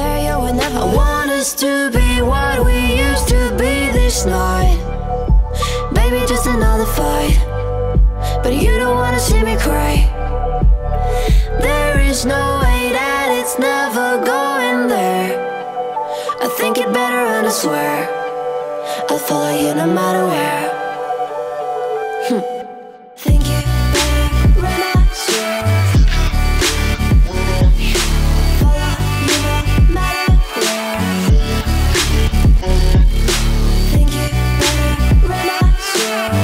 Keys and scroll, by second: 12.8-18.6 typing, 19.8 space, 22.7 shift+7, 23.2 space, 25.3 shift+g, 35.5 shift+r, 35.8 shift+u.